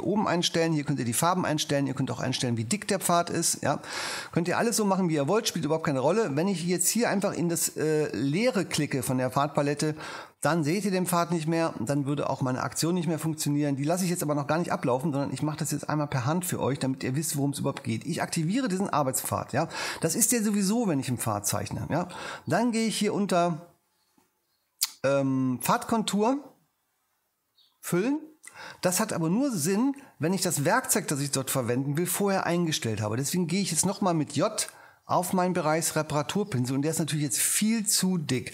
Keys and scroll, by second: 35.0 j.